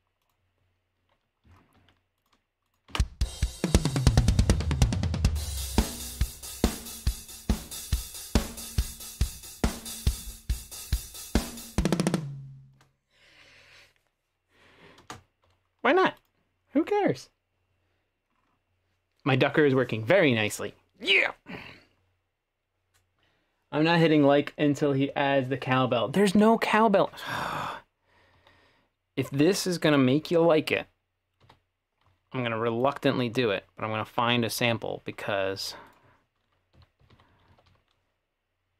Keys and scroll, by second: 2.9 space, 15.0 space, 28.2-28.5 typing, 31.4 F3, 36.5-38.1 typing.